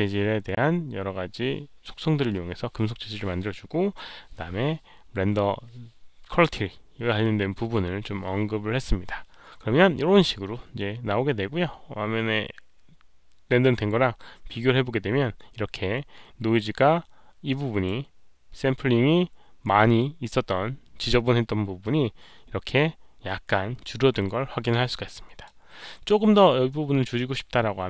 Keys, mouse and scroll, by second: 13.7-16.5 drag, 17.4 click, 18.9 scroll up 1, 19.2 click, 21.8-25.4 drag, 25.8-26.4 scroll down 1, 27.0 scroll up 1.